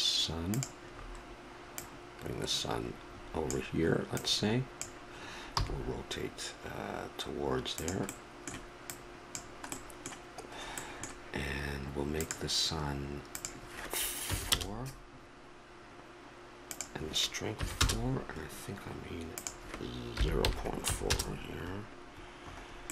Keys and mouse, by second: 0.9 middle click, 1.8-3.7 drag, 4.2-6.1 drag, 5.5 r, 8.1 middle click, 8.9-10.7 drag, 9.8-12.2 middle drag, 12.2-15.3 drag, 16.8-18.6 drag, 19.4-21.3 drag, 22.5-22.9 middle drag.